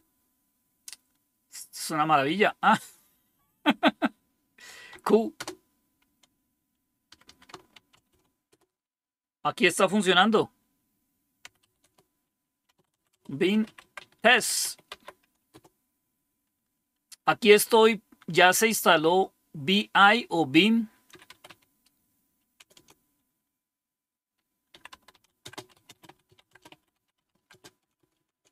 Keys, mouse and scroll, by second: 4.8 typing, 5.3 Return, 7.0 Escape, 7.2 Escape, 7.7 shift+;, 8.1 q, 8.4 Return, 11.1-15.5 typing, 20.8-22.7 typing, 24.4-28.5 typing.